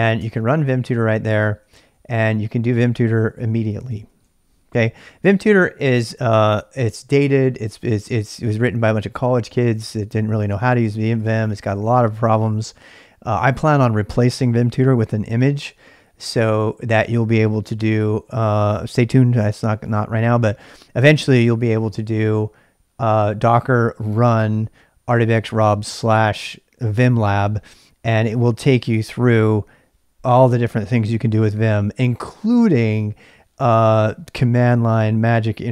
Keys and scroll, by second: 0.0-0.1 typing, 0.2 Return, 1.6-13.1 typing.